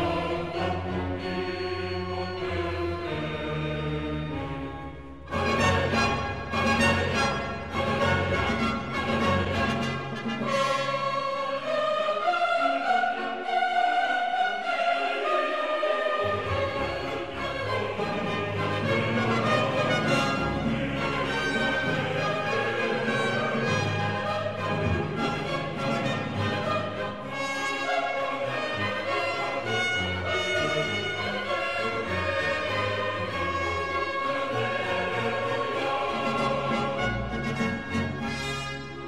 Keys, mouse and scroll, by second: 3.7 shift+a, 4.5 shift+a, 5.6 click, 8.0-11.2 middle drag, 14.8 g, 19.9 x, 21.0 x, 31.7 click, 33.0-35.6 middle drag, 35.6 7, 36.4 s.